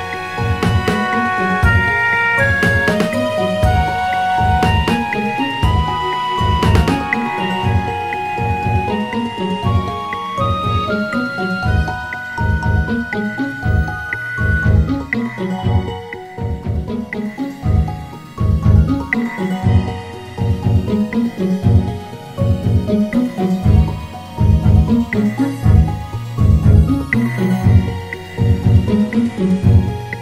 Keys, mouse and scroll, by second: 0.3 shift+click, 1.2 shift+click, 2.4 shift+click, 3.2 shift+click, 4.9 click, 6.5 shift+click, 7.6 shift+click, 8.2 shift+click, 8.9 shift+click, 10.3 shift+click, 11.2 shift+click, 12.2 shift+click, 13.2 shift+click, 14.6 click, 16.2 shift+click, 17.4 shift+click, 18.4 shift+click, 19.2 shift+click, 20.1 shift+click, 20.8 shift+click, 21.8 shift+click, 22.5 shift+click, 23.8 click, 25.4 shift+click, 26.4 shift+click, 27.2 shift+click, 29.3 s.